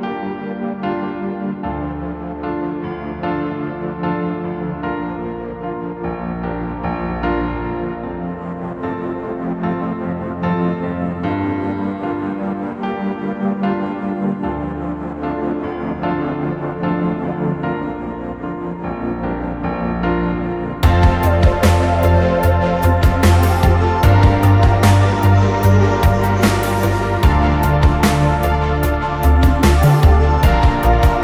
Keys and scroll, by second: 21.2 2, 21.4 0.